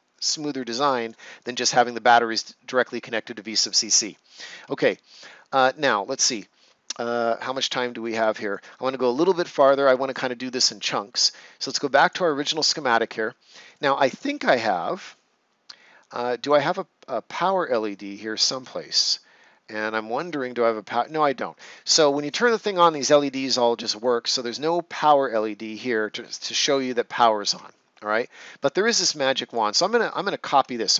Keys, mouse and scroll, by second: 4.6 click, 4.7 ctrl+s, 5.3 ctrl+scroll down 1, 5.7 right click, 6.4 ctrl+scroll down 1, 6.8 right click, 7.5 ctrl+scroll down 1, 8.0 right click, 12.0 click, 14.0 ctrl+scroll down 1, 14.9 right click, 19.3 ctrl+scroll down 1, 19.9 right click, 26.8 ctrl+scroll up 1, 28.4 click.